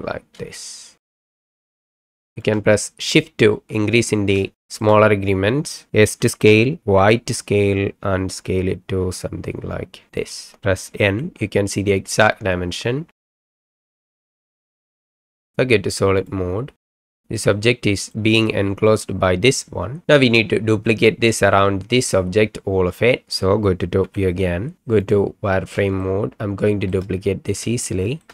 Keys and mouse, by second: 0.7-1.1 shift+drag, 1.4 s, 4.6 shift+click, 6.2 s, 7.0 y, 10.1 click, 11.0 n, 13.1-13.4 middle drag, 13.9 n, 14.1-15.3 middle drag, 16.2 click, 17.0 shift+middle drag, 17.4-18.1 middle drag, 24.0 KP_7, 25.0 click, 26.0-27.0 shift+middle drag, 27.8 shift+click.